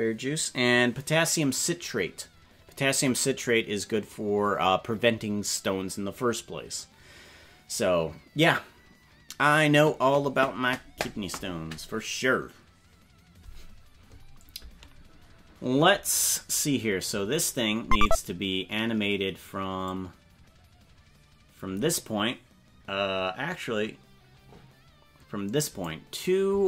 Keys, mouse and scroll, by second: 17.2 scroll down 4, 17.9 right click, 19.9-25.9 drag.